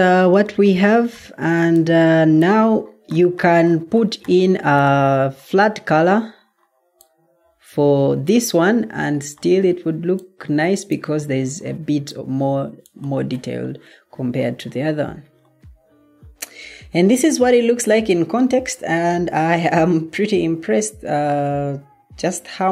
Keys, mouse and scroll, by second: 15.6-20.6 middle drag.